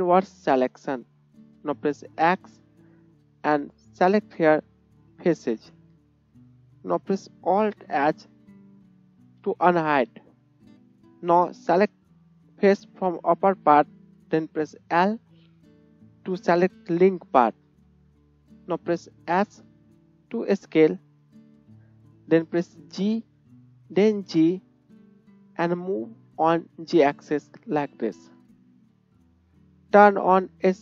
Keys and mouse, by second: 2.2 x, 5.5-10.1 middle drag, 9.4 alt+h, 11.0-12.7 middle drag, 11.1 click, 12.7 click, 12.8-30.8 middle drag, 15.2 l, 19.7 s, 23.1 g.